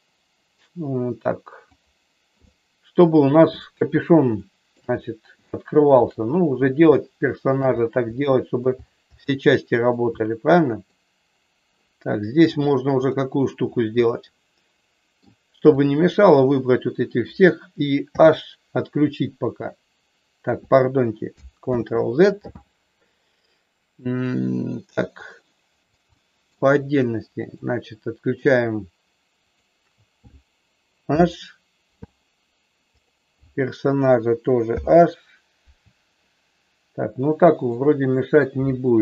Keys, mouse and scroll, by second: 1.5 click, 2.4 middle click, 4.4 shift+middle click, 5.4 shift+middle click, 6.9 shift+middle click, 8.1 middle click, 9.4 middle click, 10.2 middle click, 12.4 click, 13.9-15.2 middle drag, 15.7 click, 18.1 h, 21.7 ctrl+z, 25.2 click, 26.0 shift+middle click, 27.4 shift+click, 29.5 shift+click, 31.1 h, 32.9 click, 34.7 h, 36.1-37.7 middle drag.